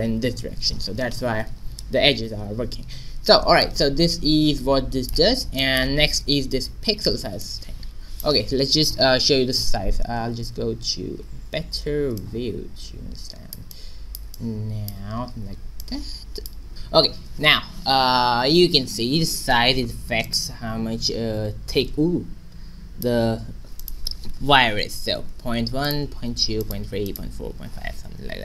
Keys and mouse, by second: 1.0 shift+z, 2.7 a, 3.2 middle click, 5.0-6.2 middle drag, 7.0 shift+z, 10.6 shift+z, 10.7 q, 11.5 q, 15.4 ctrl+b, 15.8 click, 17.6 shift+z, 20.3-22.0 drag, 23.8-25.4 drag, 26.0-28.4 drag.